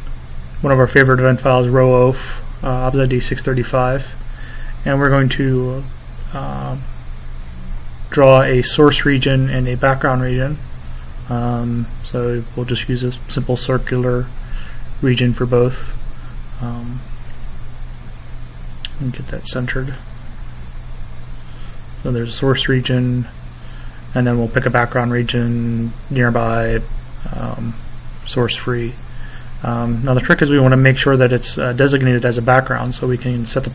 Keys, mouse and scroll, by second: 1.7 click, 6.2-7.5 drag, 8.6 click, 11.5 middle click, 13.5 click, 14.3 click, 17.0 click, 19.2 F1, 22.2-23.3 drag, 24.0 click, 25.6 click, 28.9 click, 30.8 click, 32.4 click.